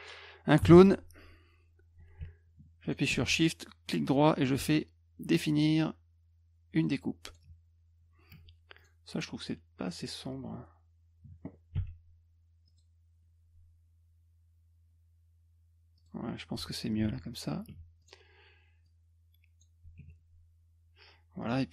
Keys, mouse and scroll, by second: 0.7 alt+d, 2.8 shift+click, 3.3 right click, 6.7 click, 7.3 click, 8.8 click, 12.7 click, 16.0 click, 17.0 F1, 18.0 click, 18.9 click, 21.4 click.